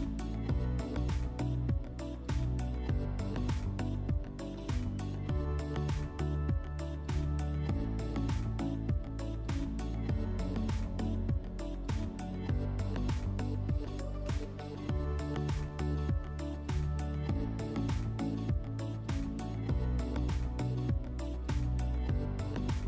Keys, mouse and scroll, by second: 0.3 click, 1.6 click, 2.9 click, 3.9 click, 6.5 click, 7.3 click, 10.1 click, 11.3 click, 11.9 alt+w, 15.5 middle click, 17.5 click, 21.4 click.